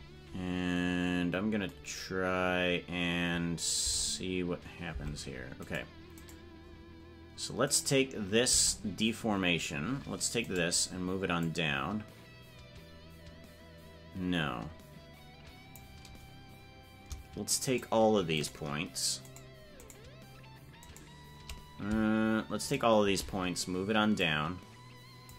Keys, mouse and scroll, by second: 3.8 Tab, 5.7-8.5 right drag, 8.5 Tab, 10.4 right click, 11.4-15.7 drag, 24.2-25.3 drag.